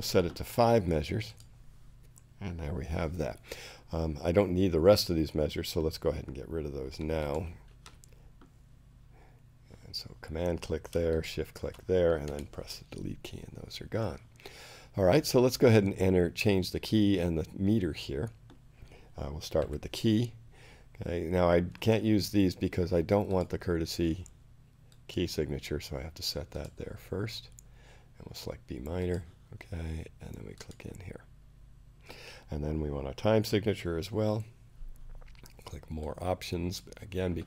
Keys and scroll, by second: 12.2 shift+BackSpace, 12.8 BackSpace, 19.6 k, 33.9 t.